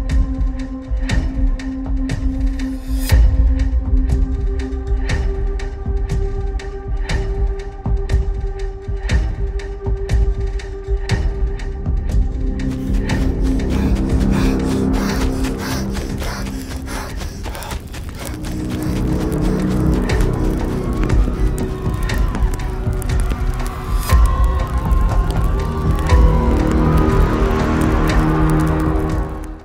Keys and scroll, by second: 0.2 a, 0.8 w, 4.7-6.4 typing, 8.8 d, 9.1 a.